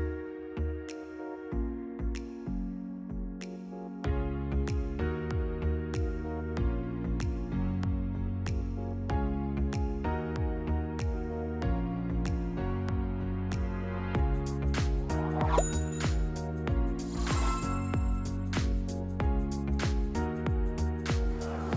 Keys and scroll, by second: 1.9 v, 8.0 e, 16.8-19.5 typing, 21.0 v.